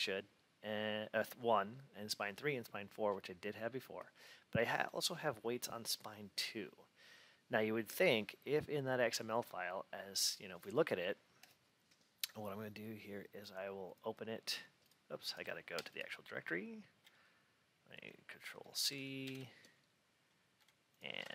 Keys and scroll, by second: 18.5 ctrl+c, 19.1 super+e, 21.1 ctrl+v.